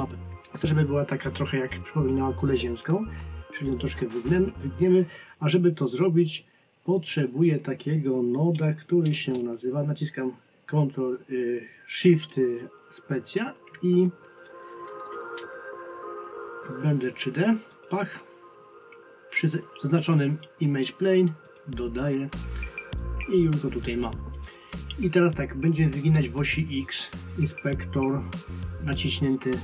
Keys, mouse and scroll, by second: 6.9 click, 23.0 click.